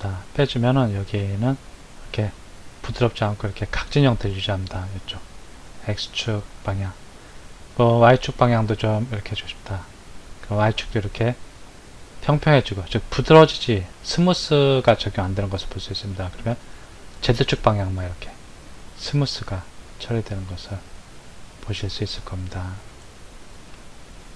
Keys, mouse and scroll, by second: 3.8-8.6 middle drag, 8.6 click, 18.2-21.3 middle drag.